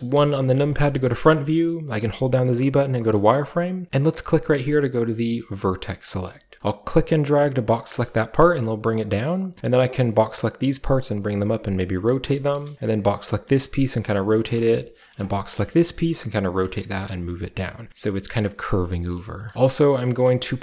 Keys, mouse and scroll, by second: 0.9-2.0 shift+scroll up 1, 0.9-3.2 shift+middle drag, 2.0-3.9 shift+scroll up 1, 2.0 z, 2.5 z, 3.3 shift+middle click, 5.7 click, 6.3-7.8 shift+middle drag, 6.7-8.5 shift+drag, 8.5 g, 9.2 click, 9.6 click, 11.1 click, 11.2-14.4 typing, 11.5 click, 12.0 click, 12.2 click, 12.7 click, 14.1 click, 15.0 click, 15.4-17.6 shift+middle drag, 15.7-16.9 typing, 16.0 shift+click, 16.5 shift+click, 16.8 shift+click, 17.6 click, 19.2 middle click, 19.3-20.0 typing, 19.5 middle click, 19.6-20.5 shift+scroll up 1, 19.6-20.6 shift+middle drag, 20.5-20.6 ctrl+shift+scroll up 1.